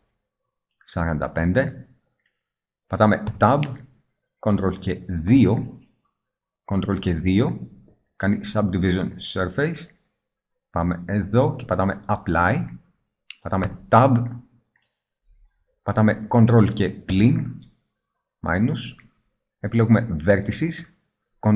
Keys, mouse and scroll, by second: 2.5-3.1 middle drag, 3.4 Tab, 5.4 ctrl+2, 13.8 Tab, 17.3 ctrl+KP_Subtract, 20.5-21.5 middle drag.